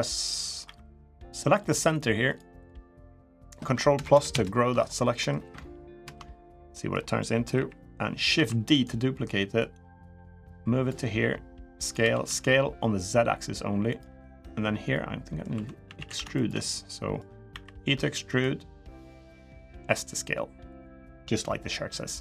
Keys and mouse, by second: 0.0 middle click, 0.4 3, 1.3 click, 1.7 shift+click, 2.3 shift+click, 2.9 shift+click, 3.7 ctrl+KP_Add, 4.8 ctrl+KP_Add, 4.8 middle click, 6.5 ctrl+KP_Add, 6.5 middle click, 7.3 KP_1, 8.1 shift+d, 9.4-10.6 drag, 10.9 s, 11.7 s, 14.0 middle click, 14.7 middle click, 15.3 2, 15.6 a, 15.8 a, 16.1 alt+shift+click, 16.5 middle click, 17.3 e, 18.8 click, 19.5 s.